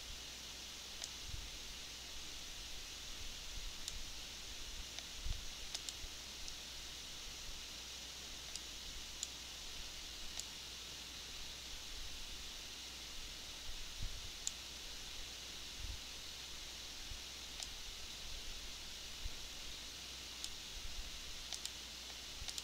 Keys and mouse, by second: 2.9 click.